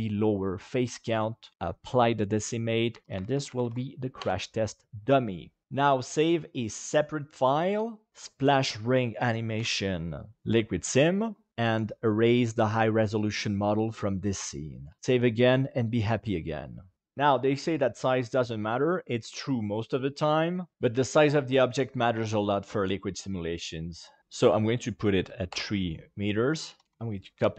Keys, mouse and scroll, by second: 1.5 click, 2.9 F2, 3.5 shift+m, 5.6-7.0 drag, 11.5 ctrl+z, 11.5 ctrl+click, 12.5 Delete, 15.0 ctrl+s, 24.2 ctrl+z, 24.5 click, 26.3 click.